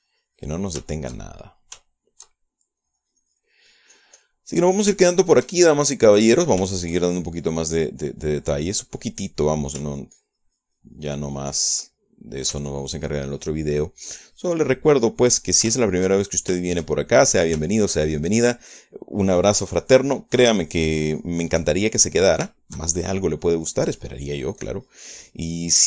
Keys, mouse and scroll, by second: 0.0 click, 0.9-2.3 drag, 2.4 shift+middle click, 3.4 shift+middle click, 4.3-5.9 drag, 6.0 middle click, 6.6 shift+middle click, 7.5 click, 8.0 shift+click, 9.0 click, 10.0 click, 10.7 click, 11.4-13.3 ctrl+drag, 13.4 ctrl+click, 14.1-17.2 ctrl+drag, 17.3-19.0 ctrl+shift+drag, 19.2 ctrl+shift+click, 20.0 click, 20.8-24.0 drag, 24.1 shift+middle click, 25.1 shift+click.